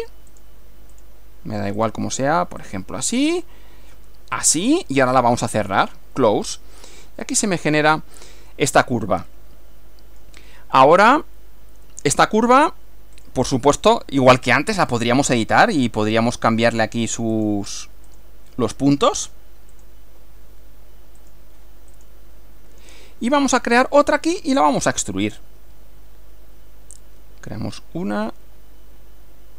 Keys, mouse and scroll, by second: 0.4 click, 1.0 click, 1.8 click, 2.6 click, 4.4 click, 5.7 click, 6.6 scroll down 2, 7.2-8.7 middle drag, 9.3-10.4 middle drag, 13.2 click, 14.8 click, 17.4 click, 18.1 click, 19.2 click, 19.8 click, 21.2 click, 22.0 click, 23.4-24.5 middle drag.